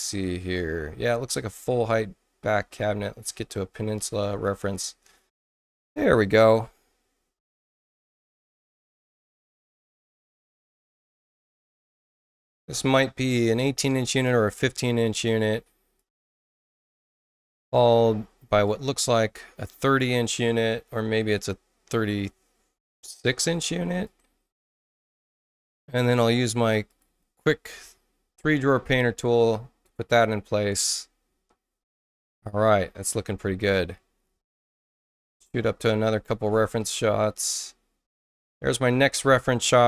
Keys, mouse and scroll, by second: 0.7-2.8 scroll up 12, 2.8 middle click, 3.1 middle click, 3.9 middle click, 4.4 middle click, 4.7 scroll down 2, 8.3 click, 11.8-14.2 drag, 15.1 click, 15.9 click, 16.6 click, 18.6-23.4 drag, 23.9 click, 24.6 click, 26.8 click, 27.7 click, 34.2-35.3 scroll up 6, 35.5 middle click, 35.5-37.1 scroll, 36.0 middle click, 36.3 middle click, 36.6 middle click, 36.9 middle click, 37.3 middle click, 37.6 middle click.